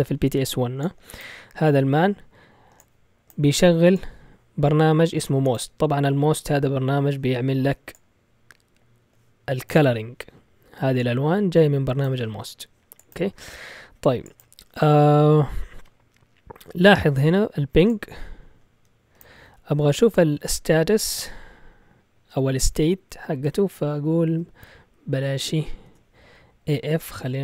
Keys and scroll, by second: 22.6 Up, 23.3 Down, 23.7 Left, 24.1 Right, 24.6 BackSpace, 25.2 BackSpace, 25.3 BackSpace.